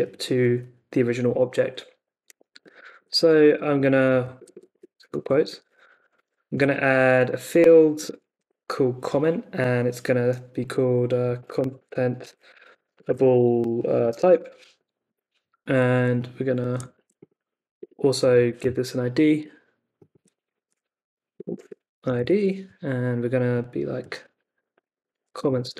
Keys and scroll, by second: 2.7-6.7 typing, 3.1 Left, 4.1 Right, 5.2 Left, 8.1 shift+a, 8.4 space, 10.9-15.0 typing, 16.9 super+c, 17.7 Return, 18.1 Up, 18.4 super+v, 20.6-22.6 typing, 24.1-25.7 typing.